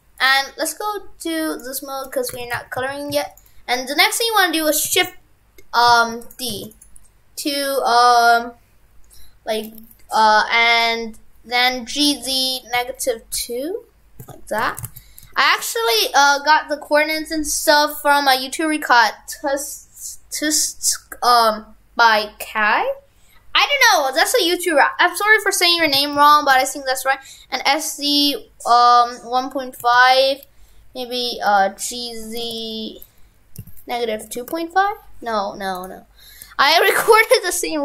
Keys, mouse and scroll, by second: 1.6 click, 2.3 shift+f, 6.6 shift+d, 6.8 right click, 14.6 shift+f, 36.7 ctrl+click.